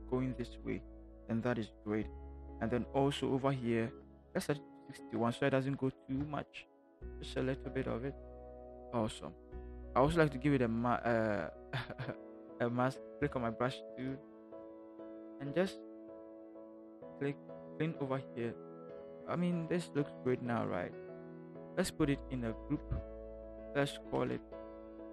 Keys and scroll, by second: 5.9 6, 6.0 1, 13.5 b, 15.0 [, 15.6 [, 16.3 [, 22.6 ctrl+shift+g, 24.5-25.1 typing.